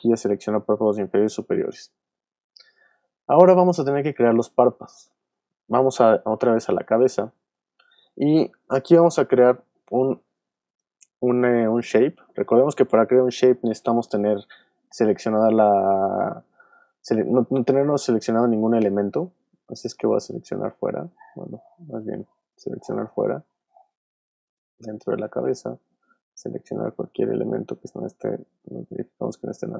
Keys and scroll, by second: 0.1 shift+super+z, 1.0 super+z, 3.6 alt+space, 4.4 space, 21.1 super+z.